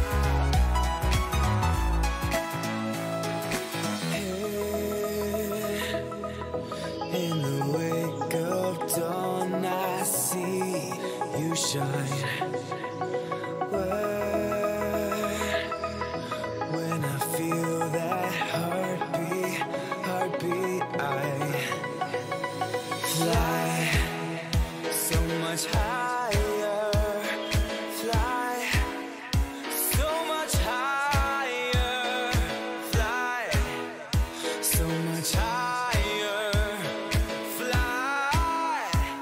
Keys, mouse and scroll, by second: 0.1 ctrl+z, 1.1-3.5 middle drag, 3.2 a, 3.7-6.3 right drag, 8.2-10.2 middle drag, 9.6-11.5 drag, 17.0-19.3 middle drag, 20.7 ctrl+z, 21.6-24.2 middle drag, 23.9-28.4 typing, 24.2-28.9 right drag, 30.4 a, 30.9 a, 31.3 a, 32.0 right click, 32.5 middle click, 33.2 right click, 34.2-35.6 middle drag, 35.6-37.7 drag, 37.7-39.2 middle drag.